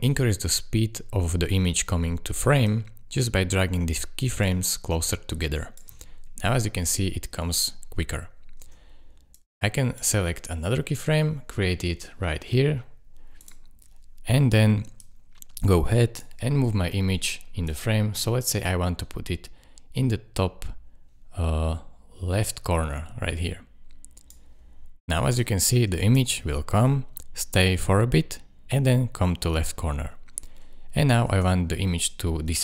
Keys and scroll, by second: 5.9 space, 8.6 space, 26.3 space, 31.3 space.